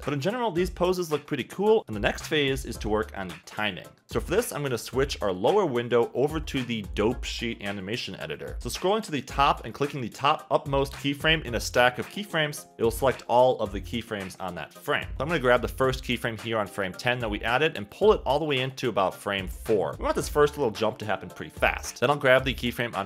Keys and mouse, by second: 0.0 space, 2.2 space, 7.4 middle click, 8.6 a, 10.7 space, 12.7 click, 21.4-23.0 typing, 22.2 click.